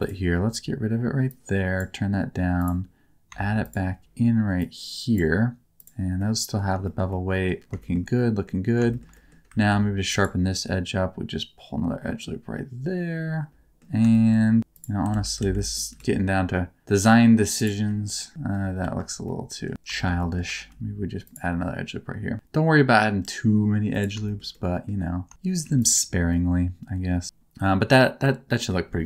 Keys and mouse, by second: 1.3 click, 3.6 shift+click, 4.7 click, 5.7 click, 6.1 middle click, 6.8 shift+middle click, 7.1 middle click, 7.7 shift+middle click, 8.1 middle click, 8.9 shift+middle click, 9.1 middle click, 9.5 ctrl+r, 13.5 middle click, 14.1 shift+middle click, 14.6 2, 14.7 right click, 15.1 alt+z, 15.3 alt+z, 15.5 middle click, 15.9 g, 15.9 middle click, 17.5 click, 18.1 middle click, 18.8 ctrl+z, 19.2 middle click, 19.9 middle click, 20.1 middle click, 20.5 ctrl+r, 23.9 click, 24.2 shift+middle click, 24.5 middle click, 25.6 3, 25.7 click, 26.2-28.6 middle drag.